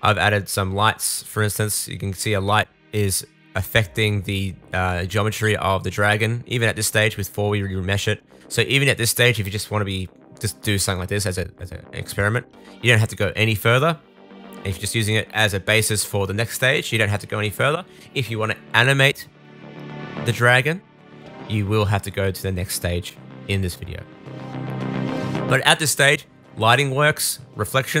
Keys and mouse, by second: 1.3 middle click, 1.5-8.6 drag, 2.7 g, 5.2 g, 8.6-10.9 middle drag, 10.9-11.9 drag, 12.4-16.2 drag, 13.0 g, 16.2 middle click, 16.3-21.9 drag, 19.6 shift+d, 21.9 middle click, 22.8 click, 23.0 middle click, 23.1-28.0 drag, 26.4 g.